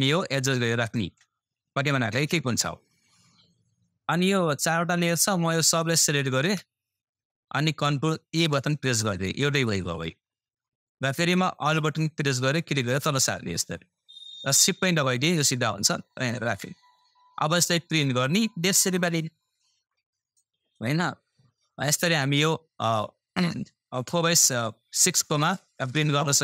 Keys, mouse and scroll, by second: 5.8 Left, 6.0 shift+click, 8.3 ctrl+e, 9.6-12.5 drag, 12.5-17.5 alt+drag, 17.5-17.8 scroll down 1, 18.0-19.7 scroll up 1, 23.3 scroll down 1, 25.9 scroll up 1, 26.2 scroll down 1.